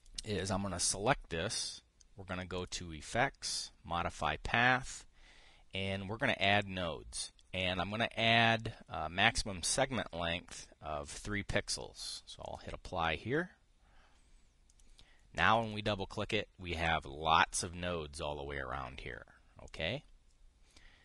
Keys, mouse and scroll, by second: 0.6 click, 3.3 click, 7.1 click, 8.3 click, 13.1 click, 15.4 click, 16.1 click, 20.4 click.